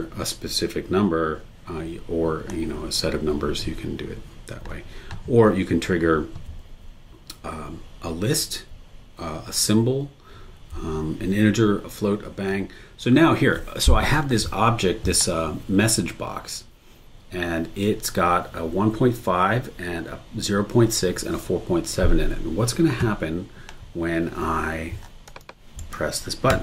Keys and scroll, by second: 25.8 super+e.